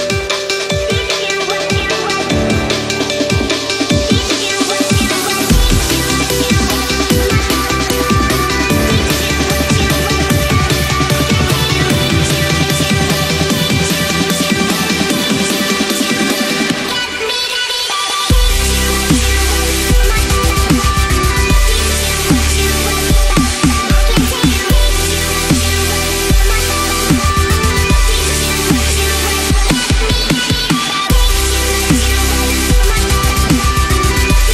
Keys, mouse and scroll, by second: 0.8 click, 1.7 Left, 3.1 click, 5.8-6.3 drag, 7.3 click, 8.4 space, 8.7-9.4 click, 8.8 space, 11.2-11.7 drag, 14.0 click, 15.1-15.6 space, 16.1 click, 19.5-22.2 drag, 23.6-24.0 drag, 27.0 ctrl+-, 27.4 space, 27.6 click, 27.8 space, 30.1 click, 32.1 click, 33.4-34.0 drag.